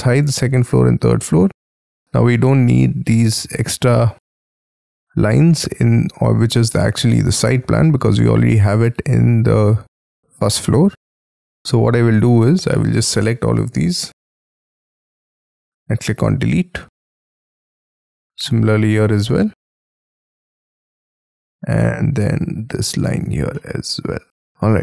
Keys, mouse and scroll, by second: 0.6 double click, 1.6 scroll down 6, 2.0-2.5 scroll up 13, 2.7-3.3 scroll down 8, 3.5 scroll up 2, 3.7-4.1 scroll down 12, 5.5 middle click, 7.3 middle click, 7.7-8.1 scroll down 5, 8.1-9.4 scroll up 7, 9.4 scroll down 4, 9.8 scroll up 7, 10.2-11.3 scroll down 14, 11.3 scroll up 5, 12.7 middle click, 13.0-16.1 scroll down 3, 16.1 Delete, 16.6 scroll down 6, 17.1-17.9 scroll up 7, 17.9 scroll down 2, 19.2 Delete, 20.1 Delete, 20.5-21.8 scroll down 6, 22.0 middle click, 23.0 Delete, 23.5 middle click, 24.7 Escape.